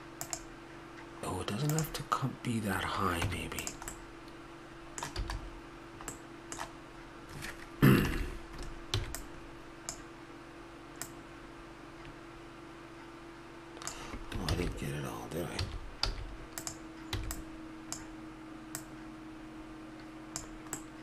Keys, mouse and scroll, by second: 3.2 Tab, 3.9 middle click, 4.7 middle click, 5.2 a, 9.0 b, 14.5 ctrl+z, 15.6 a, 16.1 z, 17.2 b, 20.8-21.0 middle drag.